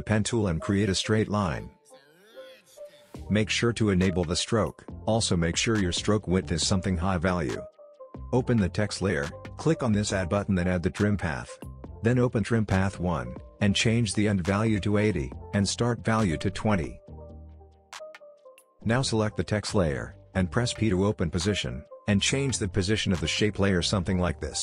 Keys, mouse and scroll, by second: 1.8 click, 2.8 shift+click, 8.4 click, 13.5 Return, 14.4 click, 15.5 Return, 18.0 click, 20.3 p, 23.0-24.6 drag.